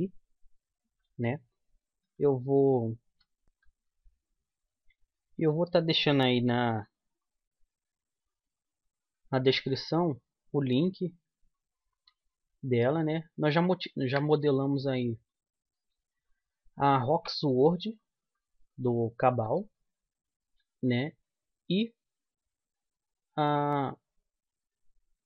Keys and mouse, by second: 9.9 g, 12.0-13.8 right drag, 12.3 g, 14.3 middle click, 15.7-19.0 middle drag, 19.6 e.